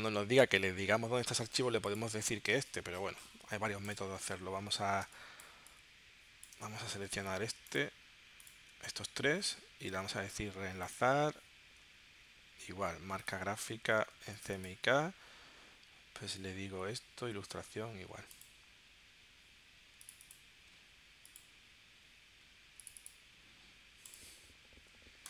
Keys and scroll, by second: 5.0 space.